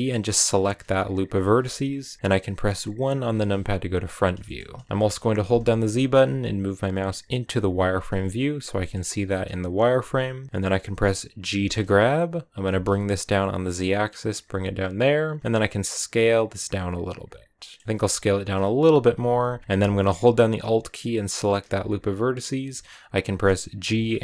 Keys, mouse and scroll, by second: 0.5 alt+right click, 3.0 KP_1, 4.0 click, 4.2 shift+middle click, 4.4-5.4 scroll up 2, 4.9 shift+middle click, 5.4 z, 7.7 scroll up 2, 8.6 shift+middle click, 8.9 scroll up 1, 11.3 g, 15.4 s, 21.3 alt+right click, 23.6 g.